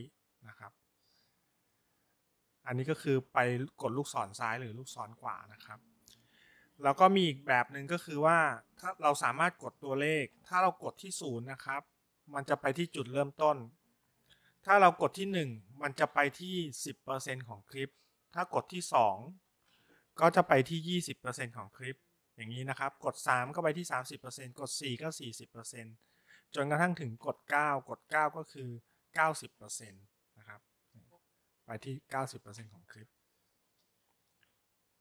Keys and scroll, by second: 0.5 Right, 11.7 0, 15.3 1, 19.6 2, 31.0 9.